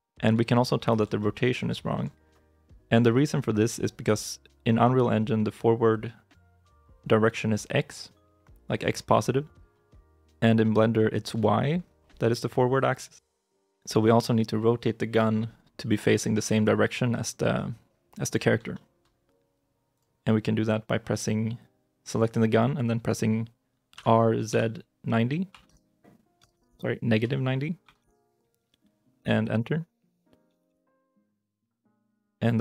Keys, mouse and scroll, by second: 0.3 shift+middle click, 1.0 shift+middle click, 1.6 shift+middle click, 9.9 shift+middle click, 11.3 shift+middle click, 16.4 right click, 17.0 shift+middle click, 17.4 shift+middle click, 18.6 shift+middle click, 23.8 r, 24.4 z, 25.4-27.9 typing, 29.1 Return, 30.5 KP_Decimal, 31.7 shift+i, 32.0 shift+middle click.